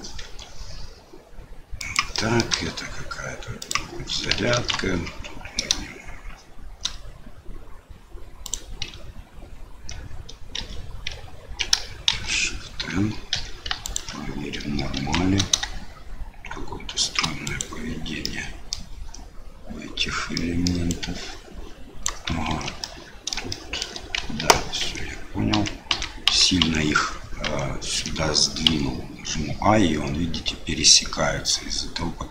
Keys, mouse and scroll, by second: 0.2 i, 2.1 click, 2.5 e, 4.5 ctrl+b, 10.5 a, 12.1 shift+n, 13.3 2, 13.8 alt+click, 14.9 ctrl+b, 18.2 middle click, 20.3 middle click, 20.8-22.3 drag, 22.5 ctrl+z, 22.8 click, 23.5 shift+click, 24.4 ctrl+z, 24.8 ctrl+z, 25.5 ctrl+z, 25.9 ctrl+z, 26.3 ctrl+z, 26.6 ctrl+z, 27.4 ctrl+z, 28.6 i.